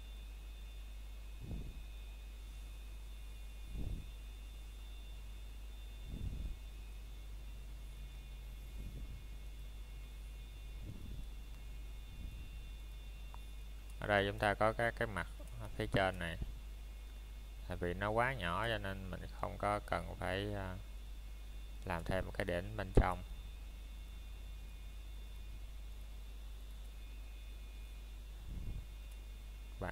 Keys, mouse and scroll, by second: 0.0 middle click, 3.9 scroll up 1, 4.3 middle click, 5.3-5.7 scroll down 1, 5.7 middle click, 6.3-7.0 scroll up 1, 7.6 middle click, 9.2 ctrl+Tab, 10.8 click, 11.3 middle click, 11.5 scroll up 1, 12.1 click, 14.6 middle click, 15.5 shift+click, 15.7 scroll down 1, 15.9 shift+middle click, 16.1 scroll up 1, 16.6 shift+click, 17.7 middle click, 18.6 shift+click, 19.8 middle click, 21.0 shift+click, 22.9-23.3 scroll down 1, 23.3 middle click, 23.6 scroll up 1, 24.1 shift+middle click, 24.5 scroll up 1, 25.8 click, 27.6 scroll down 1, 27.9 middle click, 29.0 shift+middle click.